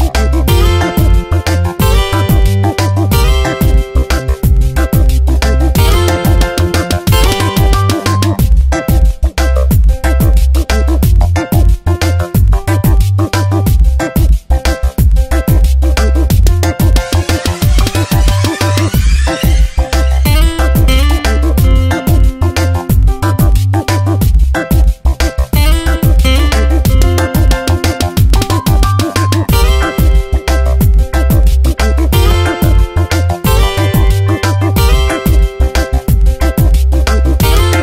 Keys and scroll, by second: 0.8 Delete, 1.7 ctrl+d, 2.1 v, 5.7 ctrl+z, 6.1 Tab, 10.0 alt+Down, 12.5 ctrl+t, 14.4 space, 17.7 Return, 21.5 Delete, 27.8 Delete, 29.3 Delete, 32.7 Delete, 35.1 ctrl+z.